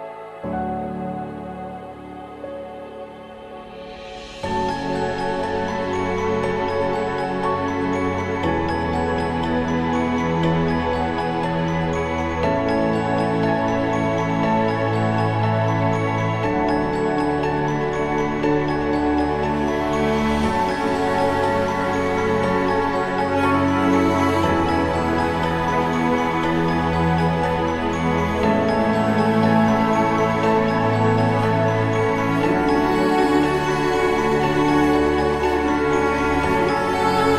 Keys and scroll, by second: 7.6 ctrl+alt+-, 23.5 ctrl+-, 24.8 ctrl+=.